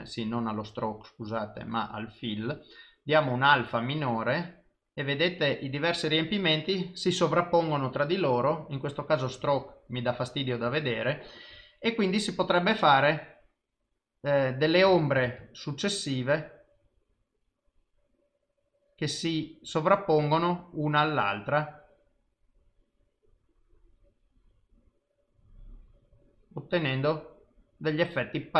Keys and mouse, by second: 1.3 click, 9.7 click, 13.0 click, 15.3 ctrl+z, 15.7 click, 20.9 click, 25.6 click.